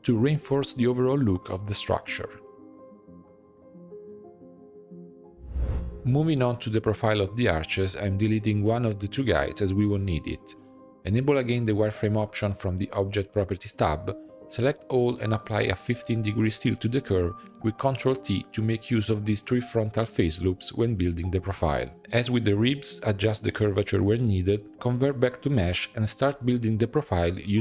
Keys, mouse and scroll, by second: 1.0 ctrl+r, 2.0 3, 2.1 alt+click, 2.5 alt+e, 3.7 Tab, 4.0 right click, 4.7 click, 6.0-7.1 middle drag, 7.1 click, 7.4 shift+middle click, 7.8 click, 7.9 Tab, 8.0 click, 9.0 l, 9.4 p, 9.9 Tab, 10.1-10.5 drag, 11.0 Delete, 11.3-12.1 middle drag, 12.1 click, 13.0-14.2 drag, 14.2-15.9 shift+middle drag, 15.9 Tab, 16.3-16.8 scroll up 4, 16.8 a, 17.0-18.6 shift+middle drag, 18.6 ctrl+t, 22.0 click, 22.5 click, 23.3-24.4 drag, 24.4 g, 25.8-26.9 drag, 27.1 middle click.